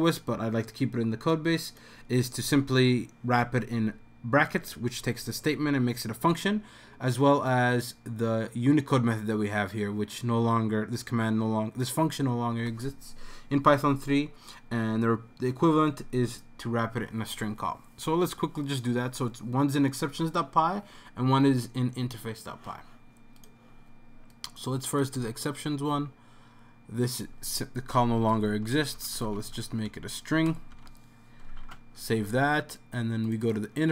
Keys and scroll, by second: 28.0-29.5 typing, 31.3-32.0 typing.